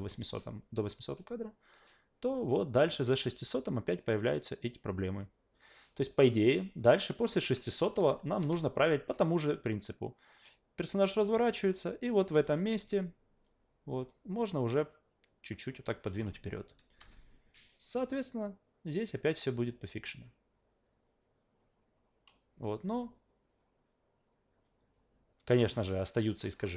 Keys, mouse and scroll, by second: 0.6-7.2 drag, 7.6 alt+middle click, 9.1-12.2 drag, 12.3 w, 13.4-14.0 drag, 14.9-15.8 drag, 17.0 a, 18.0-25.6 drag, 25.9-26.4 alt+drag, 26.6 alt+middle click.